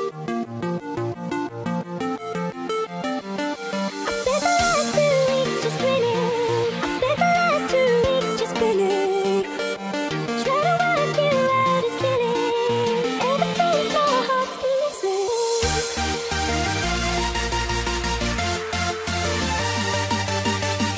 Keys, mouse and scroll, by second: 0.3 click, 4.0 click, 6.2 click, 10.4 click, 17.2 click, 17.8 click, 17.9 middle click, 19.6 middle click, 19.6 KP_3.